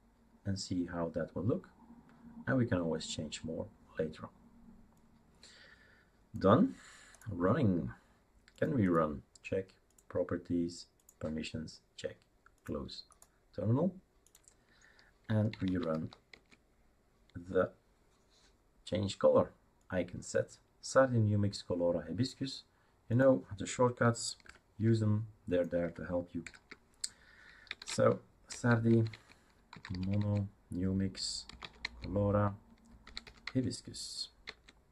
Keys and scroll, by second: 15.3-16.4 typing, 24.5 super+4, 26.4 super+6, 27.4-28.3 typing, 28.5 Tab, 28.9 Tab, 29.1 Tab, 29.4-33.5 typing, 34.4 Tab.